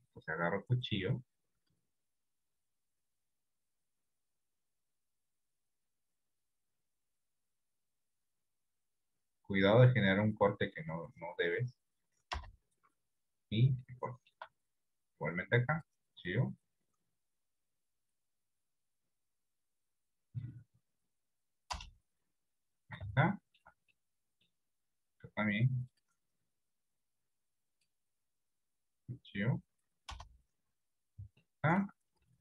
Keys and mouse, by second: 1.8 click, 3.7-13.1 drag, 13.9 shift+middle click, 15.7-22.8 drag, 23.3 shift+middle click, 24.1 middle click, 26.0-31.1 drag, 31.7 shift+middle click.